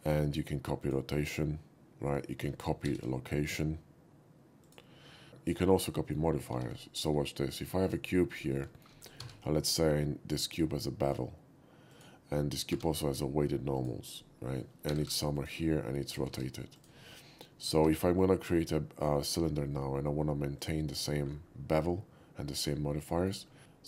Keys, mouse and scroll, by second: 0.8 click, 2.9 ctrl+c, 4.7 click, 5.3 x, 5.9 middle drag, 6.6 shift+a, 7.9 click, 8.8 shift+middle drag, 9.2 q, 11.0 click, 11.9 click, 12.8 q, 13.3 alt+q, 13.8 click, 14.9-17.7 typing, 15.4 click, 16.8 click, 20.6 click, 23.2 shift+middle click, 23.6 ctrl+c.